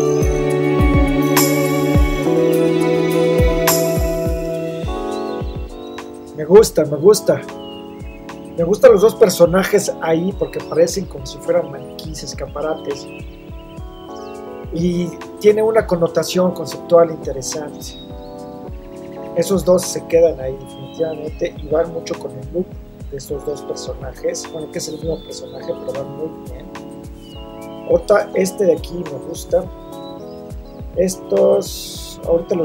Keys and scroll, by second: 0.5 v, 2.6 super+t, 3.2 shift+Return.